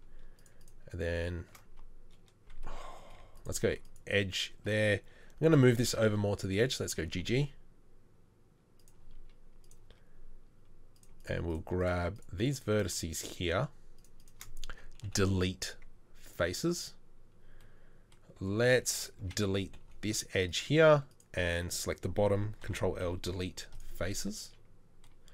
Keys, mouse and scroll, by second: 3.1 2, 6.9 g, 15.1 Delete, 19.9 Delete, 22.7 ctrl+l, 23.1 Delete.